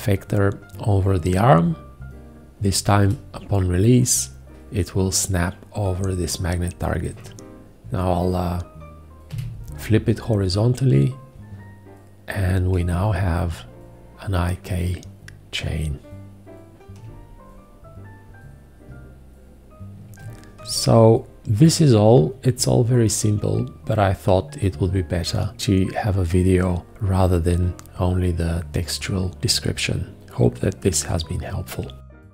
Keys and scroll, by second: 9.3 h.